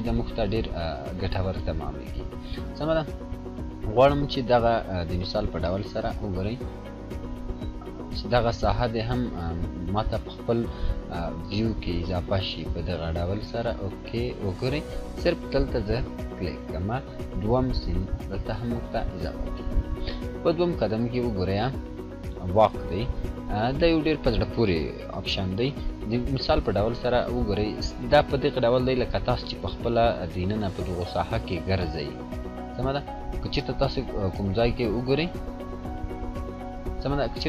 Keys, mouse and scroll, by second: 5.4 click, 5.4 scroll down 1, 6.7 click, 6.9-7.5 scroll down 2, 8.4 scroll up 1, 9.1-9.4 scroll down 2, 11.4-12.6 drag, 12.7 scroll up 1, 13.8-15.1 drag, 22.6 click, 26.8-37.4 drag.